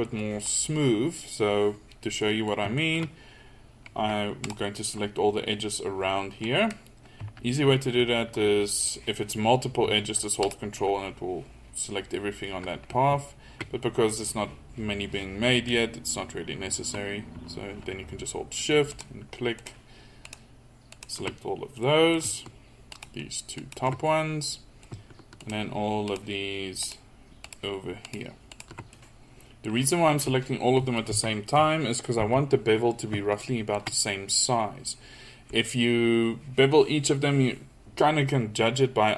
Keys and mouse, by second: 0.1 middle click, 4.5-6.2 drag, 10.5-12.2 drag, 18.9-21.9 drag, 24.7 middle click, 30.3 middle click, 31.1 KP_1, 31.6 KP_3, 32.2 KP_1.